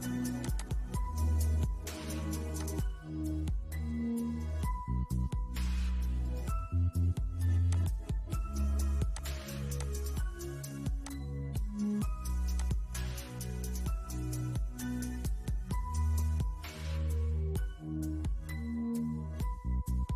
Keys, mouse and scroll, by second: 6.9-20.1 drag.